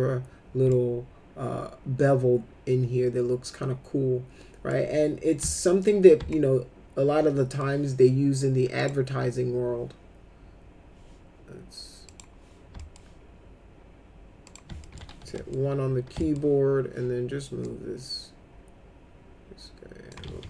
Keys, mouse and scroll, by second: 0.7-4.7 alt+middle drag, 5.4 alt+middle click, 6.3-7.6 alt+middle drag, 8.8 click, 12.1 click, 12.8 alt+middle click, 14.5 click, 14.8 alt+middle click, 15.2 1, 15.3 middle click, 16.2 alt+middle click, 17.6-20.1 drag, 20.3 ctrl+z.